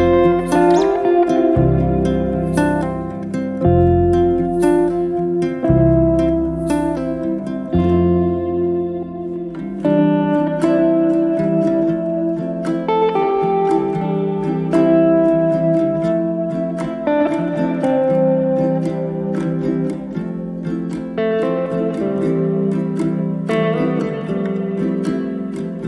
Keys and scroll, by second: 12.5 m, 17.9 space, 21.1 b.